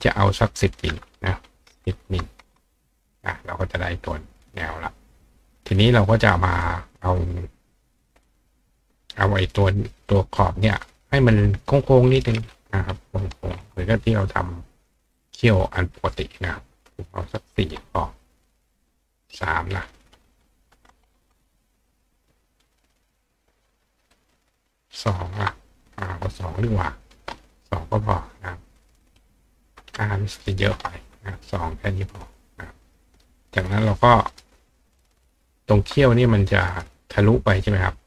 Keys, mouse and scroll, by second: 0.6 click, 3.8 click, 4.9 click, 6.6 click, 7.2 click, 10.1 click, 12.1 click, 15.2 click, 16.4 click, 19.3 click, 21.9 click, 22.6 click, 24.1 click, 28.8 click, 31.9 click, 34.0 click, 34.3 right click, 35.3 click, 37.6 click.